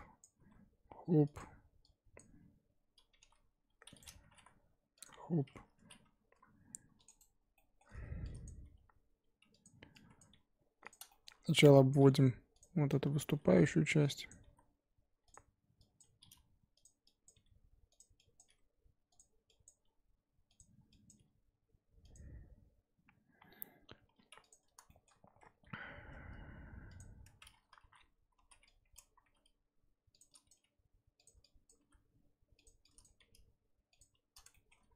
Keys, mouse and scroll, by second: 0.2 click, 0.4 g, 2.2 click, 3.1 g, 4.2 g, 5.8 ctrl+r, 7.5 shift+middle click, 7.9-8.2 scroll up 2, 8.4 click, 8.6 g, 10.2 click, 10.3 g, 11.1 shift+middle click, 11.9 click, 12.0 g, 13.1 Left, 13.2 g, 14.3 Left, 14.4 g, 16.0 Left, 16.2 g, 17.2 Left, 17.3 g, 18.4 click, 18.4 g, 19.6 click, 19.7 g, 21.1 click, 21.1 g, 24.6 click, 24.9 shift+middle click, 25.1-25.5 scroll up 2, 25.5 e, 27.8 ctrl+z, 28.4 ctrl+z, 28.9 click, 29.2 e, 30.5 click, 30.6 g, 31.7 click, 31.8 e, 33.0 click, 33.2 g, 34.5 shift+middle click, 34.8-34.9 scroll up 1.